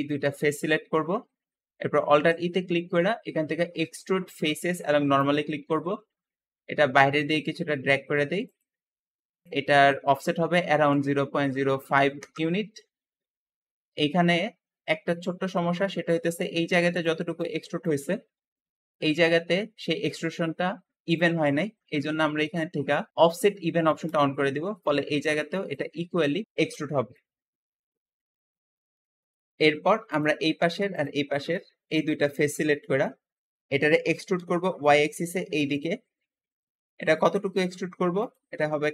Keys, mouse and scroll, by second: 0.0-1.1 shift+middle drag, 1.1-1.6 scroll up 1, 2.0 alt+e, 9.5-12.3 drag, 10.5-11.7 typing, 12.1 Return, 12.2 Return, 13.7 middle click, 14.4-15.0 scroll up 1, 15.0-21.5 middle drag, 15.8 `, 21.5 Escape, 24.0 click, 26.4 Escape, 28.3-30.0 middle drag, 30.0 click, 30.8 shift+click, 31.2-33.7 shift+middle drag, 33.7 e, 34.2 y, 34.3 y, 38.1-38.9 drag.